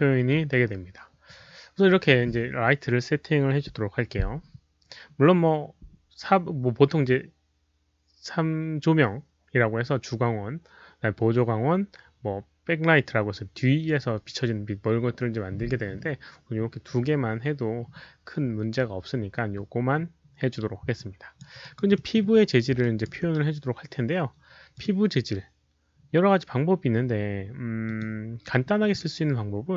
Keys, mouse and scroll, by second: 0.9 alt+click, 0.9 alt+middle click, 0.9 q, 20.9 alt+click, 21.6 alt+right click, 22.2 alt+middle click, 22.2 alt+right click, 22.2 alt+click, 22.8 alt+right click, 24.7 click, 27.8 alt+right click, 27.8 alt+middle click, 27.9 click.